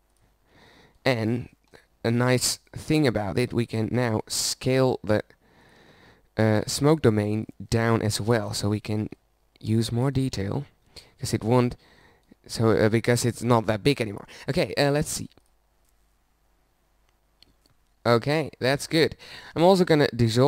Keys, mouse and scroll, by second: 2.4-4.3 middle drag, 4.5 Tab, 7.0 s, 8.7 s, 10.2-11.5 drag, 12.6 Tab.